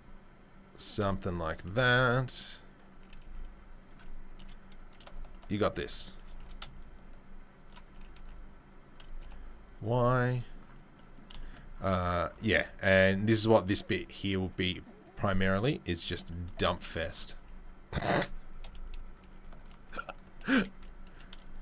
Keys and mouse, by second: 1.6 g, 3.2 s, 4.4 KP_3, 4.8 KP_1, 5.6 ctrl+KP_3, 6.2 g, 7.9-16.9 right drag, 7.9 g, 14.3-16.0 drag, 14.3-16.0 middle drag, 16.9-19.7 drag, 17.4 s, 18.6 KP_3, 19.2 KP_1, 19.7 ctrl+KP_3, 20.7 s.